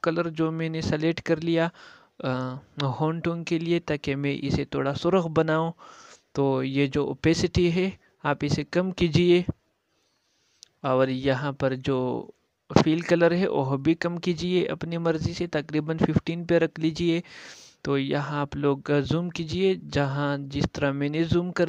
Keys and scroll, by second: 14.0 ctrl+space, 20.3 ctrl+z.